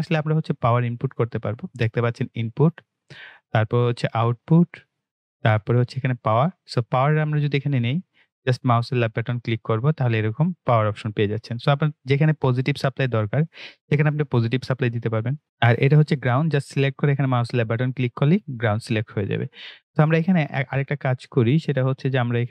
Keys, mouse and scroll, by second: 2.6 click, 15.3 click, 15.4 Delete, 20.2 click, 21.2 click.